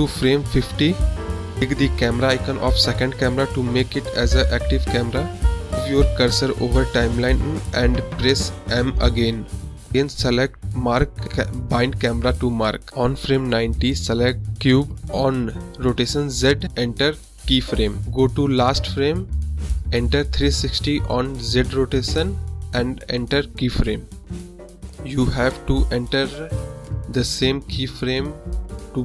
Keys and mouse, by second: 0.7 click, 2.7 m, 3.3-4.2 right drag, 5.0 click, 5.4 space, 8.8 space, 9.7-12.7 drag, 14.7 click, 16.1 click, 16.8 click, 18.0 ctrl+z, 19.0 click, 19.7 click, 20.6-21.9 drag, 22.3 click, 24.3 click, 25.9 click, 26.3 space, 27.1 space, 27.3 click, 27.4 space, 28.6 space.